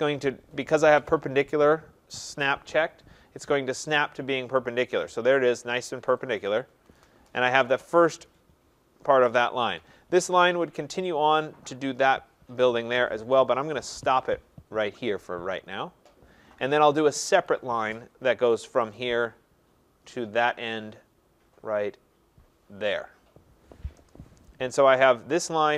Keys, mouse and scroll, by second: 6.4 click, 13.7 Return, 17.5 click, 19.0 click, 23.0 click, 24.0 Return, 25.3 click.